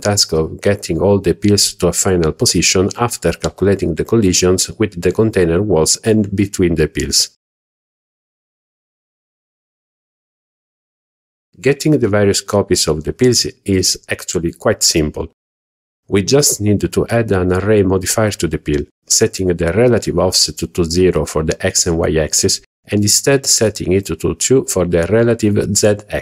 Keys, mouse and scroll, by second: 13.4 click, 16.9 click, 22.1-25.1 drag, 24.2 Tab.